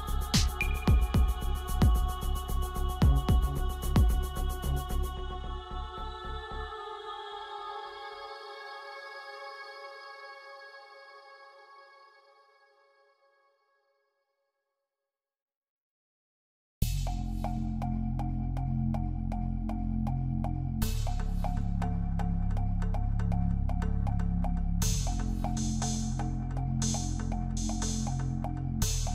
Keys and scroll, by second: 28.0 ctrl+z.